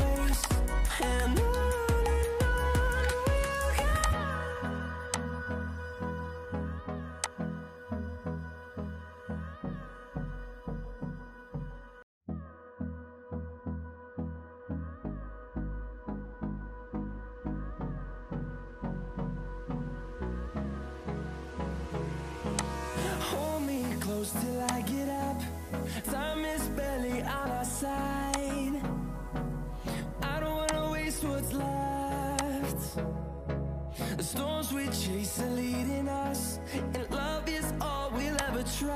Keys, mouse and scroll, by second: 19.0 F10.